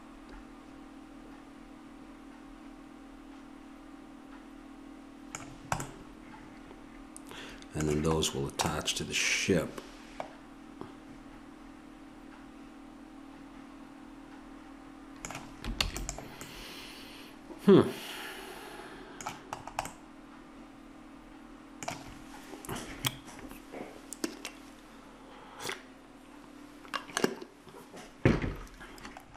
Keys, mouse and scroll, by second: 5.8-11.1 middle drag, 15.8 ctrl+s, 19.8-22.5 middle drag.